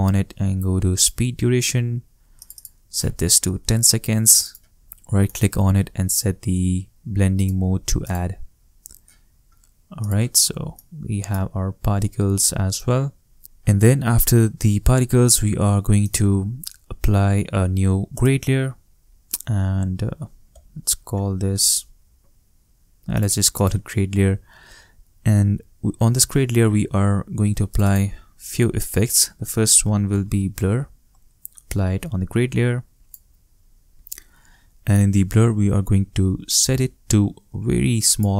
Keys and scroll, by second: 3.1 shift+i, 3.4 shift+o, 4.6 shift+Return, 11.3 shift+space, 13.4 shift+space, 20.5 shift+`, 29.4-30.3 typing.